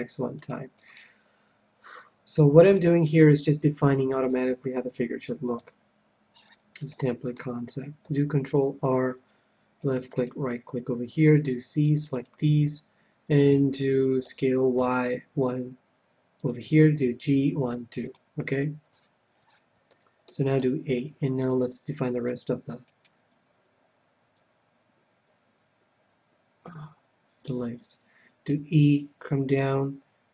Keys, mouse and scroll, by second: 0.8 middle click, 2.0-4.4 middle drag, 5.5 KP_3, 6.3-8.7 middle drag, 8.5 ctrl+r, 10.3-14.1 right drag, 11.1 c, 14.3 s, 16.4-19.7 drag, 17.0 g, 19.3-21.6 middle drag, 20.5 a, 21.0 a, 21.5 c, 22.9-25.0 right drag, 28.5 e, 29.5-30.3 drag.